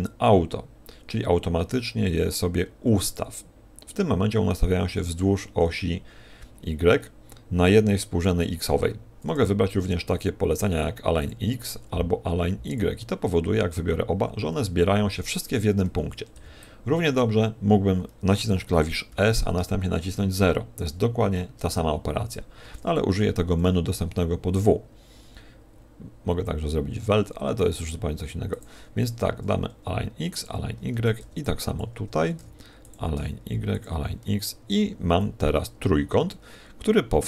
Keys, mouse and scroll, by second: 11.3 w, 12.7 w, 16.0 a, 17.1 b, 19.1 s, 30.4 w, 30.9 a, 31.7 b, 32.9 w, 33.8 w, 34.6 a, 35.1 a.